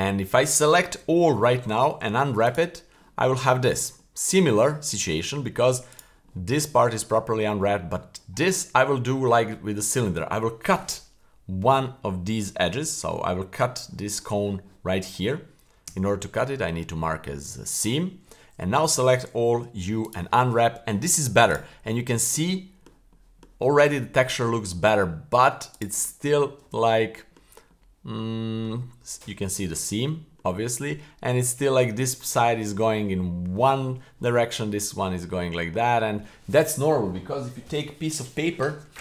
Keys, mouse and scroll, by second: 1.0 a, 2.0 u, 4.0-5.0 middle drag, 5.4 middle click, 5.9 right click, 6.3 middle drag, 7.1 middle click, 8.4-8.8 middle drag, 9.1-10.7 middle drag, 15.9 w, 18.6 a, 19.6 u, 21.5 right click, 22.0-22.4 middle drag, 22.6-22.9 middle drag, 23.1-23.4 middle drag, 23.8-24.3 middle drag, 24.6-24.9 middle drag, 25.1 middle drag, 25.8 right click, 26.1 middle drag, 26.6 Tab, 27.1 middle click, 27.7-28.6 middle drag, 28.9 scroll up 2, 30.0 middle click, 35.3-35.7 middle drag, 36.0-38.5 scroll down 1.